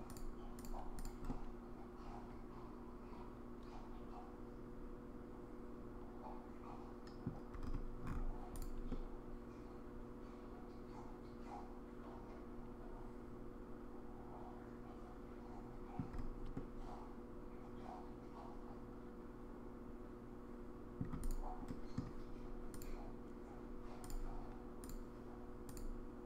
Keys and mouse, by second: 1.3-7.3 middle drag, 8.5 click, 8.9-16.0 middle drag, 16.5-21.0 middle drag, 21.2 click, 21.7-22.0 middle drag, 22.8-24.1 drag, 25.7 click.